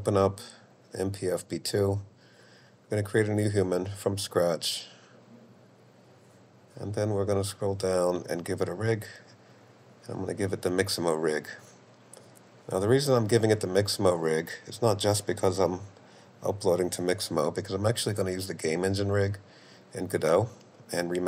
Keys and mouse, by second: 5.2 right click, 7.4 right click, 9.7-11.0 right drag, 19.4-21.2 drag.